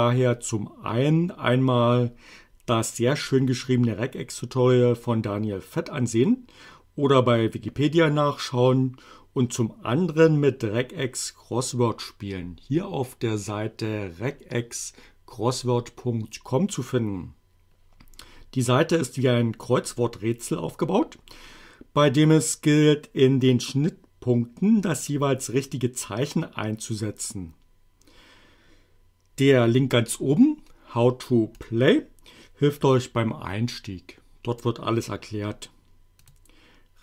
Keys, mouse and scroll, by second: 31.6 click, 36.3 click.